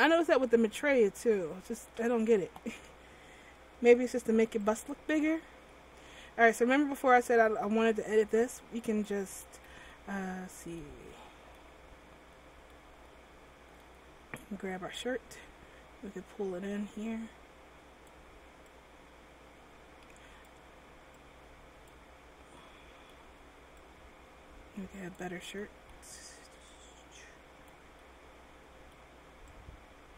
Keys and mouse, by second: 4.8-6.4 drag, 6.4-8.0 middle drag, 8.0-10.1 drag, 9.7 ctrl+z, 15.1-16.3 drag, 16.3-22.8 middle drag, 22.8-25.8 drag, 26.8-28.9 middle drag, 29.7-30.1 middle drag.